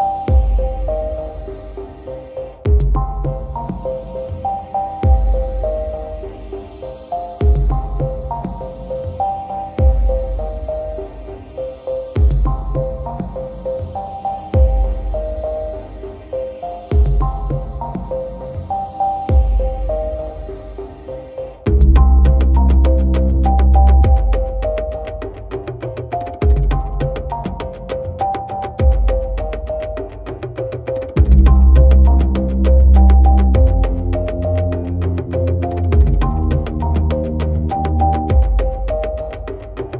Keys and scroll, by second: 6.2 ctrl+t, 11.8 ctrl+j, 12.0 ctrl+t.